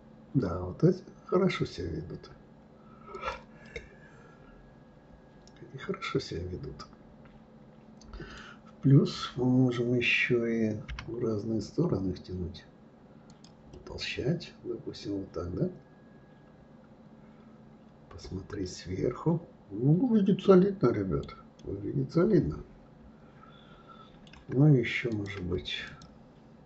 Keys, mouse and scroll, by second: 3.6-6.6 middle drag, 13.7-16.7 middle drag, 21.6-24.6 middle drag, 25.1 click, 25.8 shift+click.